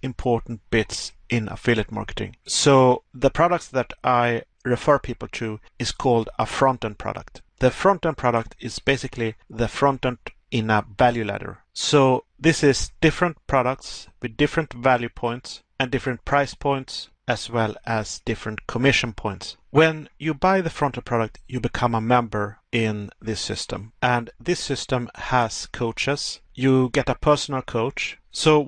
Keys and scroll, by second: 13.2 Pause, 17.0 Pause, 18.4 Pause.